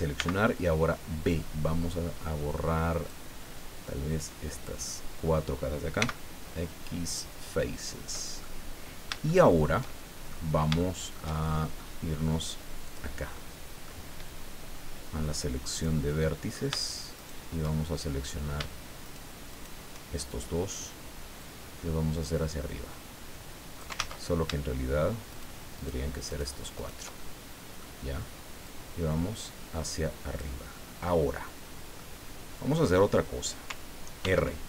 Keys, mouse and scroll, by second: 0.1 b, 3.1-4.8 drag, 6.0 x, 7.0 click, 8.4-10.5 middle drag, 10.5 scroll up 3, 10.8-12.0 shift+middle drag, 12.9 click, 13.3 middle click, 15.7 right click, 16.1 middle click, 17.1 shift+right click, 19.0 shift+right click, 19.5 shift+right click, 21.4-24.0 drag, 23.9 ctrl+z, 25.3 shift+right click, 25.7 shift+right click, 26.3 shift+right click, 26.7 shift+right click, 27.2 shift+middle click, 28.6-30.6 drag, 30.7-32.1 middle drag, 32.2 scroll down 2, 32.7 click, 34.2 ctrl+r.